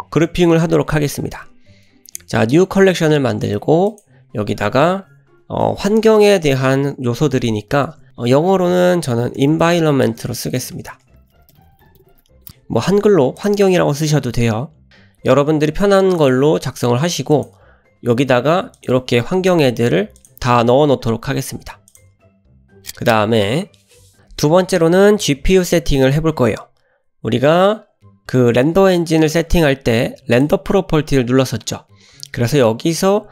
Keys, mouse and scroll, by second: 1.3 m, 5.4 BackSpace, 10.7 BackSpace, 10.9-11.3 BackSpace, 14.9 click, 16.2 click, 17.3 click, 18.8 click, 20.2 click, 21.8 click, 22.4 click, 24.1 click, 30.3 click, 31.4-33.3 scroll up 3.